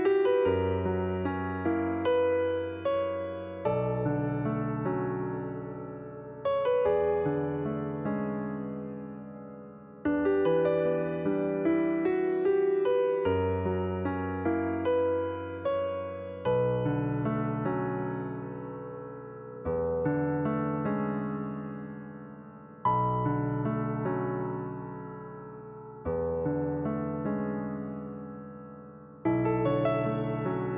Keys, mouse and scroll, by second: 1.7 shift+s, 4.5 click, 6.3 click, 7.1 click, 7.7 alt+click, 8.3-8.6 scroll down 1, 8.6-10.0 shift+middle drag, 10.0 click, 13.1 click, 14.7 ctrl+z, 16.5 click, 17.6 click, 18.8 click, 20.0 click, 25.5-30.1 drag.